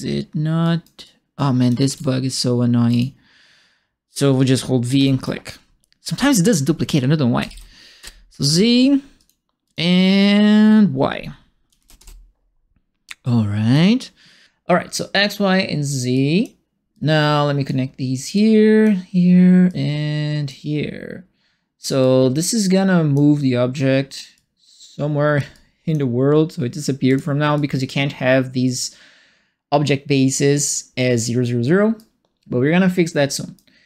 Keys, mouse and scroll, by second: 0.6 right click, 1.0 click, 1.8 ctrl+d, 2.8 right click, 2.9 click, 4.0 click, 4.8 v, 4.9 click, 7.4 shift+z, 8.0 Return, 9.1 click, 9.6 click, 11.7 shift+y, 11.9 Return, 13.2 click, 15.1 click, 16.1 click, 16.9 click, 18.3 click, 19.6 click, 22.0-23.1 drag, 24.3-25.3 drag, 25.5 click, 27.0 click, 27.5 click, 31.9-33.5 right drag.